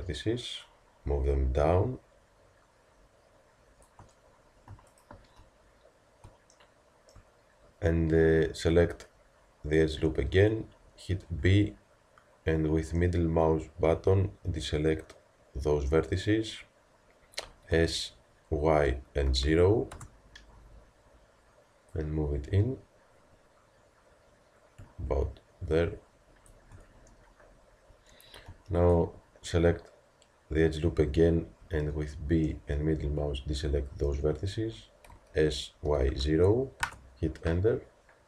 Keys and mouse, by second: 11.3 b, 17.7 s, 21.9-31.6 drag, 31.6 b, 35.1 s.